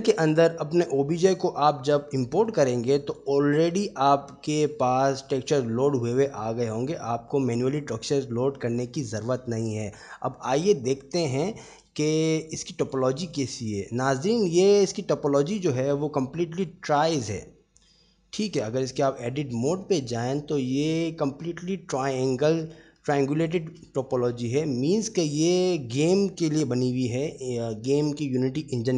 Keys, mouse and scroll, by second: 2.7-3.0 middle drag, 3.3 click, 4.3 h, 7.7-8.3 middle drag, 10.6 click, 11.6 shift+middle drag, 12.7 click, 13.1 click, 13.7 middle drag, 15.7 click, 16.8 middle click, 18.7 Tab, 19.8 click, 21.1-22.4 drag, 23.3 shift+middle click, 25.1-26.2 middle drag.